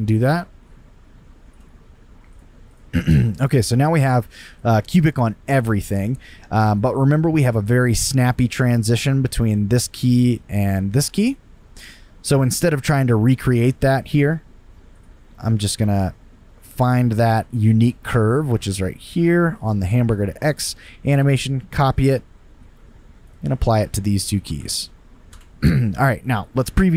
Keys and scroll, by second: 21.2 super+c, 21.3 super+c, 24.6 super+v, 25.3 Return.